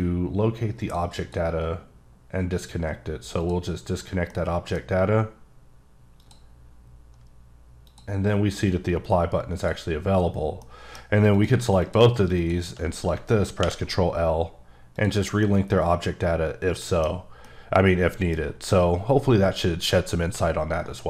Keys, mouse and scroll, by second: 0.8 click, 1.2 click, 3.3 click, 4.3 middle click, 5.0-5.5 scroll up 1, 6.2 click, 7.8 click, 8.8 click, 10.6 middle click, 11.3 click, 12.4 shift+double click, 13.6 ctrl+l, 14.9 click, 15.4 middle click, 17.4 middle click.